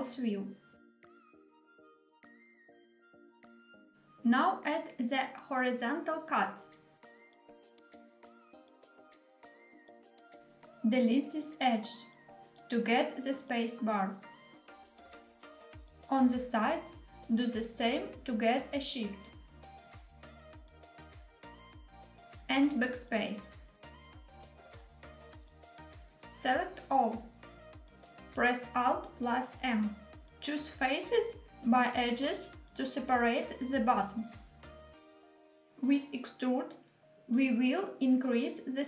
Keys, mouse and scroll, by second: 3.4 click, 4.3 ctrl+r, 7.8 click, 8.4 shift+middle click, 8.7 2, 9.6-10.2 middle drag, 11.1 click, 12.1 shift+click, 13.6 click, 13.6 x, 16.6 click, 18.1 shift+click, 20.3 x, 22.7 click, 24.2 x, 26.8 a, 28.4 alt+m, 32.9-34.3 middle drag, 34.9 shift+middle click, 36.0 e.